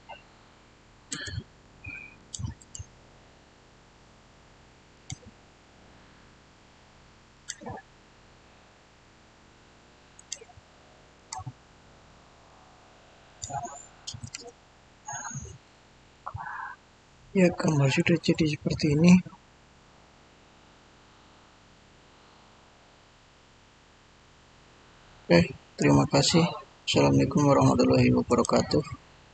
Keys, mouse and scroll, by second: 1.0 Return, 2.1 click, 2.5 right click, 4.8 click, 7.2 click, 10.1 click, 11.9 scroll down 1, 12.0-13.2 middle drag, 13.2 click, 15.6 click, 16.0 shift+middle click, 16.2 shift+scroll down 1, 28.2 click.